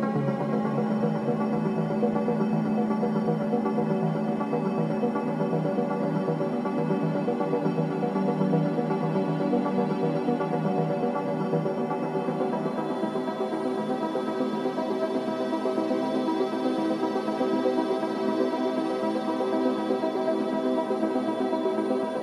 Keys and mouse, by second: 2.3 g, 4.7-5.6 drag, 7.3 click, 8.3-10.2 drag, 11.1-11.8 middle drag, 17.5 shift+a.